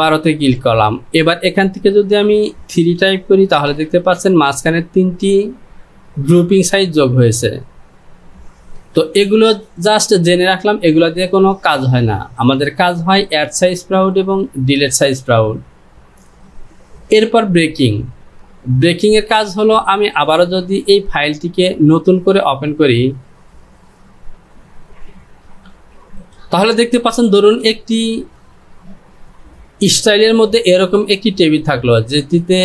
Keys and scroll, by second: 3.0 KP_3, 3.6 Return, 8.9 ctrl+z, 25.7 typing.